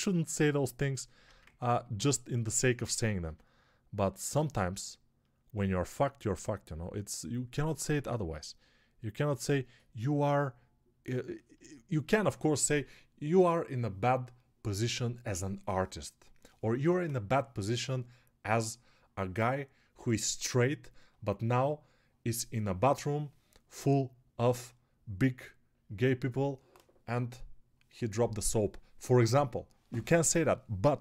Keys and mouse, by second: 0.3 alt+q, 1.3 ctrl+Tab, 2.3-31.0 ctrl+alt+right drag, 3.4 s, 6.2-31.0 drag, 6.2-31.0 middle drag.